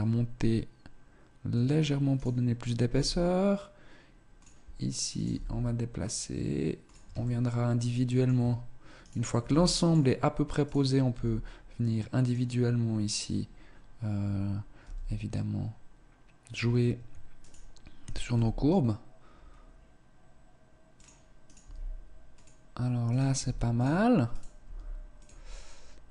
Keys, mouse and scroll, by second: 2.0 right click, 2.8 g, 5.0 right click, 5.2 g, 7.2 shift+middle click, 8.6 right click, 8.6 g, 10.0 right click, 11.0 g, 13.0 right click, 14.7 g, 17.3 right click, 18.2 g, 21.4 right click, 21.6 g, 23.0 right click, 23.3 g, 24.2 right click, 24.6 g, 26.0 right click.